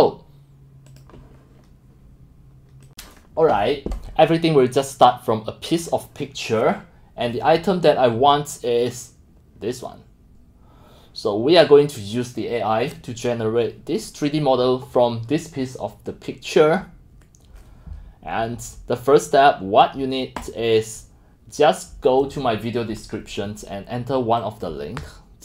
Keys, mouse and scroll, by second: 0.9 click, 6.1 click, 6.4-8.1 drag, 19.2 click, 20.5-25.4 drag.